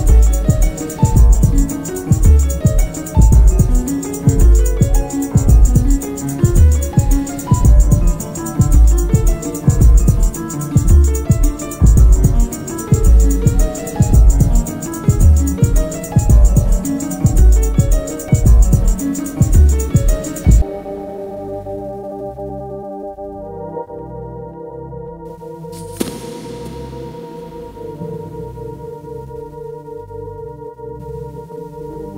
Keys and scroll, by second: 0.8 shift+h, 0.9 shift+i, 1.0 shift+p, 1.1 Return, 4.3 F1, 5.3 ctrl+d, 5.4 Escape, 5.7 F1, 5.9 F2, 7.3 1, 7.5 0, 7.6 Return, 8.1 ctrl+z, 8.7 1, 8.8 0, 8.9 Return, 13.1 shift+h, 13.2 shift+i, 13.3 shift+p, 13.4 Return, 14.8 p, 15.6 p, 17.9 F1, 18.8 ctrl+d, 20.3-21.1 typing, 21.3 Return, 24.9 F1, 25.1 F2, 26.4 F1, 26.5 F2, 26.7 F1, 29.0 F1, 29.1 F2.